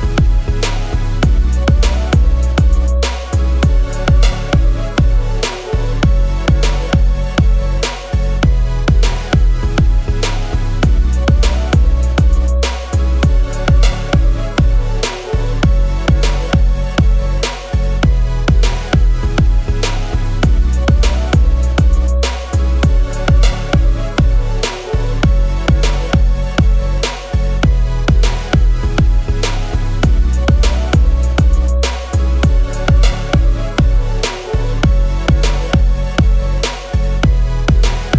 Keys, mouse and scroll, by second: 0.5 ctrl+-, 0.6 ctrl+-, 1.2-1.6 scroll, 3.9-4.9 scroll, 4.9 i, 11.0-11.3 scroll, 11.5-14.6 scroll, 19.8 ctrl+shift+], 20.5 ctrl+s, 21.4 shift+click, 34.3 ctrl+shift+].